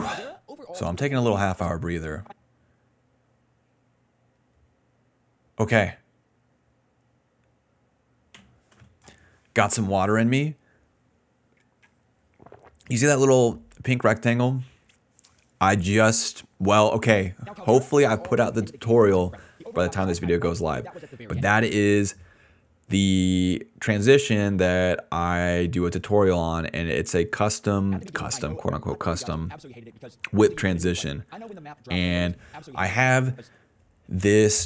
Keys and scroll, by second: 0.0-4.2 typing, 13.1 s, 13.3 s, 13.4 s, 14.7 d, 16.0 BackSpace, 16.9 ctrl+s, 17.0 space, 20.3 d, 21.5 space, 22.6-24.5 typing, 27.8 space, 33.0 space, 33.3 space, 33.5 space.